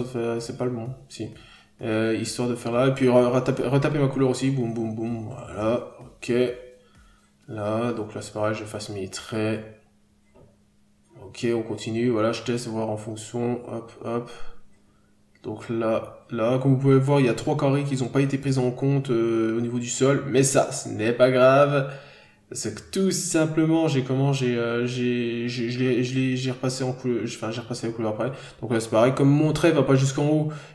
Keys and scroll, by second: 1.2 scroll down 1, 1.4 n, 2.1 scroll up 1, 3.0 p, 7.7 b, 13.3 n, 13.4 scroll down 1, 14.7 b, 16.6 scroll up 1, 18.6 ctrl+z, 19.4 p, 20.9 scroll down 1, 21.4 ctrl+z, 22.2-22.5 scroll down 2, 22.4 n, 23.0 b, 23.4 scroll down 1, 23.9 ctrl+z, 24.0 n, 24.8 scroll up 1, 25.0 b, 25.6-25.9 scroll down 1, 25.9 n, 26.1-26.5 scroll up 1, 27.3 scroll up 1, 30.2 ctrl+z.